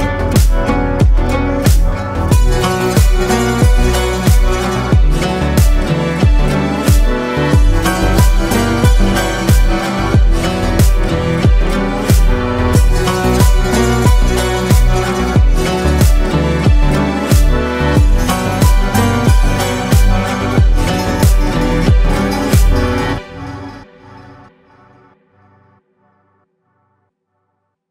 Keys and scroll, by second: 16.5 ctrl+space, 17.2 ctrl+space, 18.1 ctrl+space.